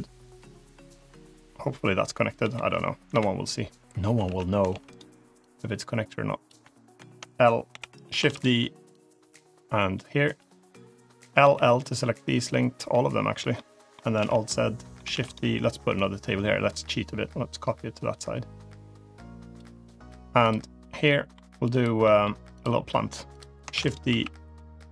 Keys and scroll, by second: 2.3 l, 3.0 KP_7, 4.1 alt+z, 4.6 shift+d, 7.5 l, 8.1 shift+d, 11.3 l, 12.2 l, 12.6 l, 14.0 alt+z, 15.0 shift+d, 23.6 shift+d, 23.9 s.